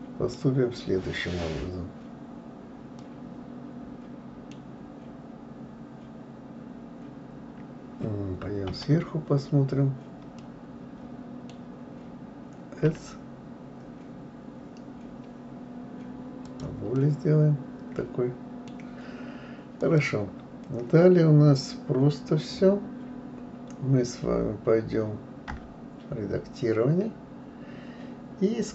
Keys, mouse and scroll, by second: 3.0-4.8 middle drag, 4.8-5.4 scroll up 1, 8.7 KP_7, 10.3-12.8 middle drag, 12.8 s, 16.9-19.8 middle drag, 19.8 click, 25.5 Tab.